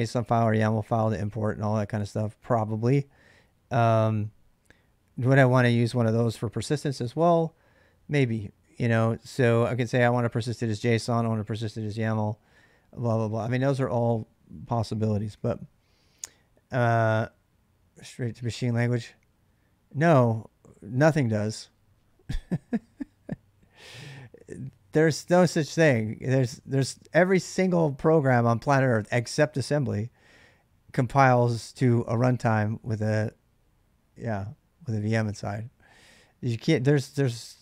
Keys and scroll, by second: 9.1 k, 9.3 k, 11.0 j, 11.2 j, 14.8 k, 15.0 k.